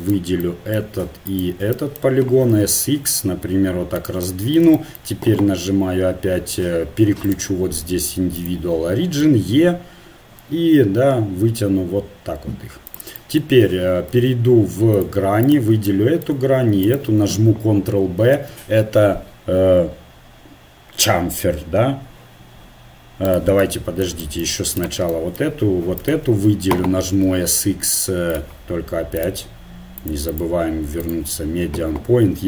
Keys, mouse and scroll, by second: 0.0 right click, 0.4-2.0 middle drag, 2.4 s, 7.2-9.1 drag, 9.2 e, 14.2 ctrl+Tab, 15.5-17.7 right drag, 17.7-19.5 drag, 18.4 ctrl+b, 23.6-24.8 middle drag, 24.8-27.1 right drag, 27.1 click, 27.1 s, 29.2-32.2 drag.